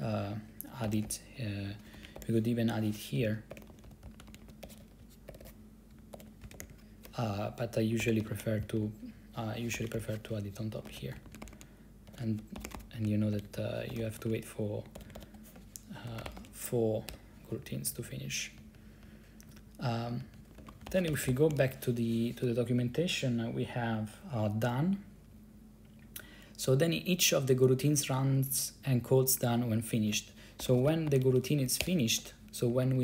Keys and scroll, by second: 0.9 ctrl+c, 2.1 ctrl+c, 2.2-7.2 typing, 8.1 ctrl+c, 8.2-16.9 typing, 17.2 Return, 17.7 Down, 17.9 Down, 18.0 Down, 18.1 Down, 18.2 Down, 18.3 Down, 18.7 Up, 18.9 Up, 19.2 Up, 19.6 Down, 19.7 Down, 20.2 Up, 20.3 Up, 20.5 Up, 20.7 ctrl+c, 20.8-22.5 typing, 30.5-31.9 typing, 32.0 Return, 32.8 Down, 32.9 Down.